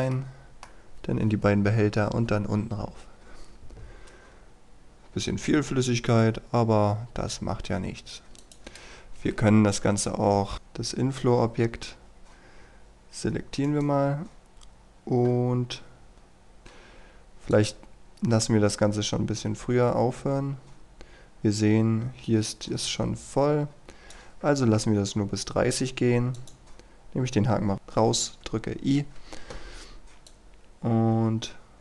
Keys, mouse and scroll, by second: 0.2 middle click, 8.5 click, 8.8 KP_1, 10.0-10.5 scroll down 1, 10.5 click, 11.4-13.7 scroll up 1, 13.7 right click, 15.7-16.1 scroll up 1, 16.1-24.4 drag, 27.7 i, 30.3-31.8 drag.